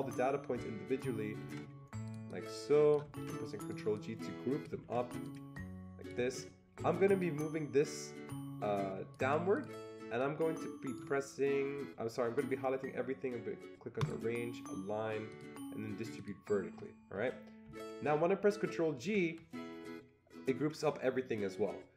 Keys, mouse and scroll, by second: 1.4 ctrl+g, 3.2 ctrl+g, 4.3 click, 4.8 ctrl+g, 5.9 click, 6.3 ctrl+g, 7.2-10.2 shift+drag, 10.2-13.5 shift+drag, 14.0-15.3 drag, 15.3 click, 16.2 click, 19.0 ctrl+g.